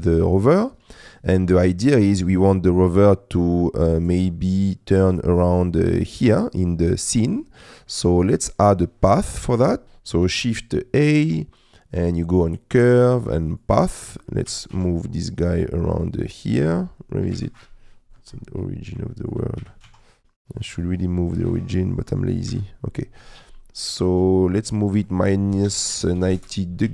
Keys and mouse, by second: 7.6 middle click, 8.5 middle click, 9.8 click, 10.3 shift+a, 14.5 g, 14.7 shift+z, 16.3 click, 17.3 KP_Decimal, 19.1 shift+middle click, 19.6 g, 19.9 shift+z, 21.8 shift+middle click, 22.5 KP_Decimal, 25.1-26.5 drag.